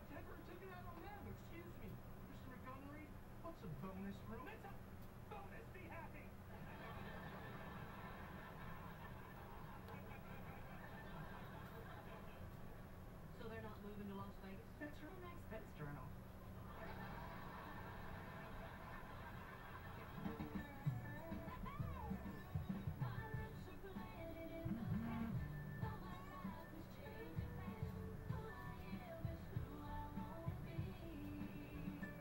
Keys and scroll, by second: 12.8-13.8 typing, 15.0 alt+p.